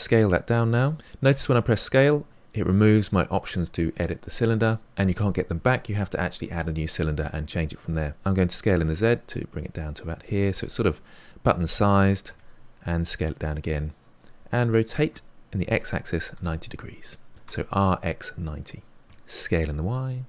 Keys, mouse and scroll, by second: 8.1 s, 10.7-12.2 middle drag, 12.2 s, 14.0-15.0 middle drag, 15.0 r, 18.6-19.0 scroll up 4, 19.0 s.